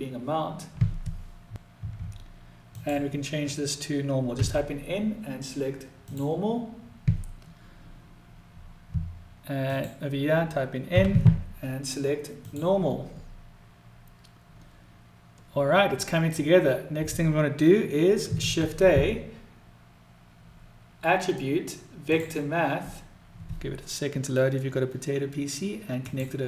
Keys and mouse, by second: 2.1-7.9 drag, 9.0-14.4 drag.